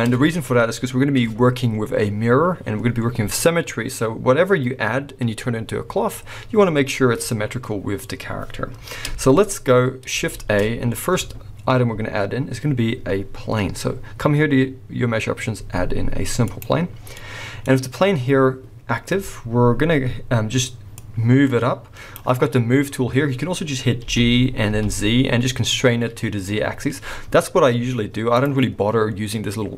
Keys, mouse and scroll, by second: 2.5 scroll up 2, 8.8-10.4 scroll down 1, 10.4 shift+a, 17.3-20.9 middle drag, 17.6 scroll up 1, 19.3-20.9 scroll down 1, 20.9 click, 23.5-24.0 scroll, 24.0 g, 28.5-29.7 drag.